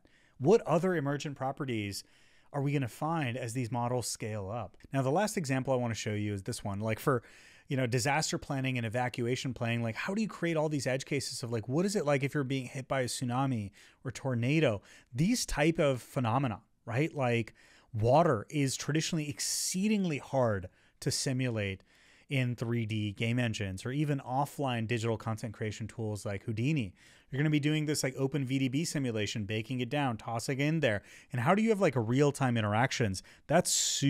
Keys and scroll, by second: 0.7 Up, 2.3 Right, 4.7 Up, 7.1 Down, 16.7 Up, 18.6 Up, 21.8 Up, 30.3 Up.